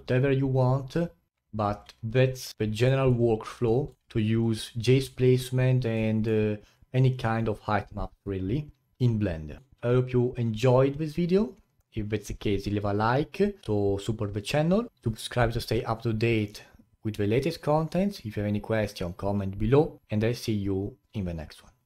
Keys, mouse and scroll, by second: 2.1-2.5 scroll down 8, 2.5 middle click, 3.3-3.7 scroll down 2, 3.7-4.3 middle drag, 4.3-5.5 scroll up 9.